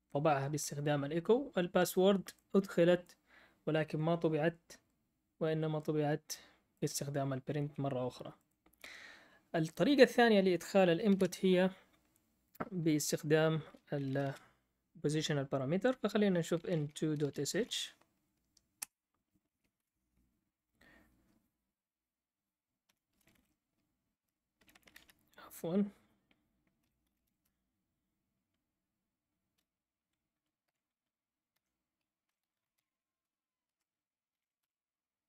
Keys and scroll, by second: 11.1 ctrl+l, 13.7-14.7 typing, 16.3-18.2 typing, 18.8 Return, 19.5-20.2 typing, 22.6-25.0 typing, 26.5-27.7 typing, 30.4-34.8 typing.